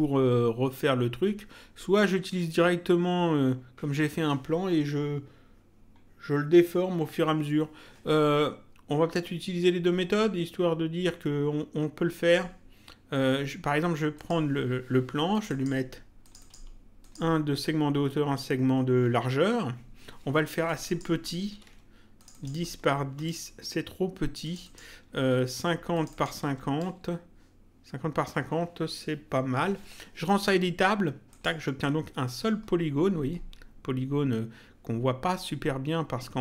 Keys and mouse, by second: 2.2 click, 14.1 click, 15.3 click, 20.6 click, 22.2 click, 23.3 Return, 24.4 click, 25.9 click, 26.8 Return, 31.3 click.